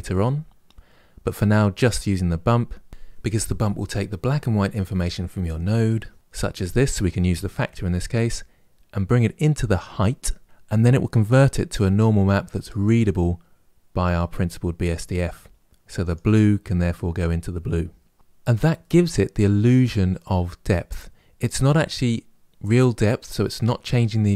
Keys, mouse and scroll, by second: 6.2-9.8 drag, 18.6-24.3 middle drag.